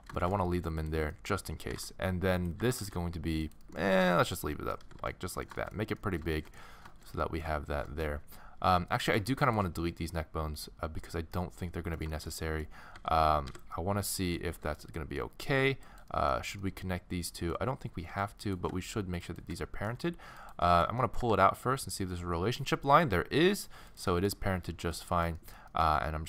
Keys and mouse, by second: 0.2 middle click, 0.8 middle click, 1.7 g, 2.6 g, 4.0 g, 4.8 a, 5.0 a, 5.3-7.4 middle drag, 8.0 middle click, 9.6-13.7 middle drag, 13.0 x, 13.9 middle click, 14.5 a, 14.7 a, 15.8-17.6 middle drag, 17.9 a, 18.1 a, 19.1-21.6 middle drag, 21.2 g, 22.2 middle click, 24.1 middle click, 24.9-26.2 middle drag.